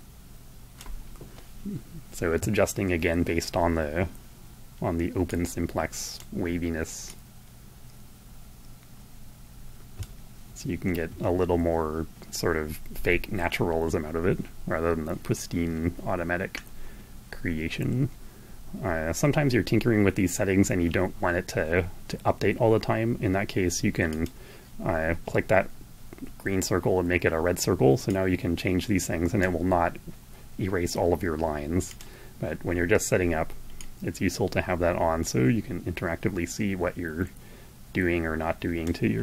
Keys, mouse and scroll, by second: 4.6-5.7 drag, 6.4-9.6 drag, 22.2-23.8 drag, 27.5-29.0 drag, 31.3 click, 33.0-38.3 drag.